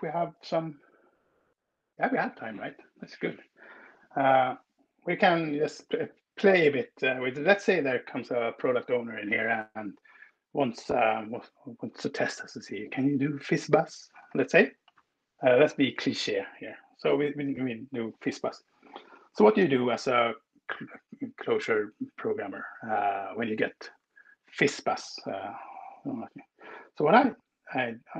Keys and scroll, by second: 17.3 Up.